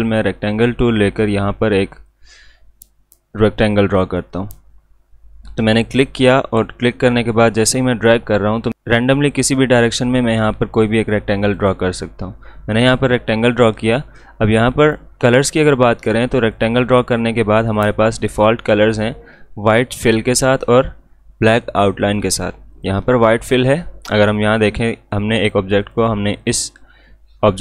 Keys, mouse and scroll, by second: 0.0 click, 2.0-8.7 shift+drag, 14.8-25.8 drag.